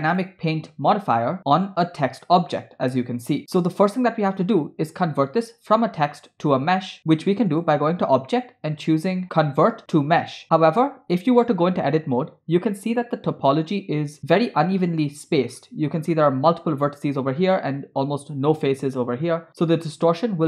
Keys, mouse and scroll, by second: 0.1 click, 1.0-4.1 drag, 7.5-10.4 drag, 12.2 Tab, 15.6 scroll down 1, 15.7-16.2 scroll up 3.